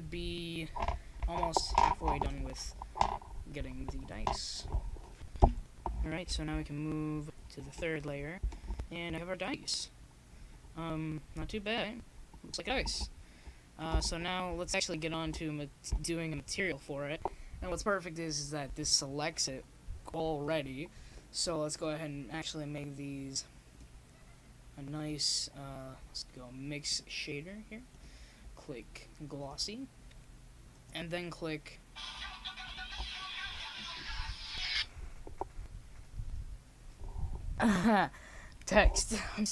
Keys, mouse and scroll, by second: 1.1 s, 3.5 KP_0, 4.8 middle click, 8.0 click, 9.5-11.9 drag, 12.3-20.5 drag, 24.1 ctrl+s, 25.7 click, 35.2 right click, 36.2 m, 39.2 shift+z.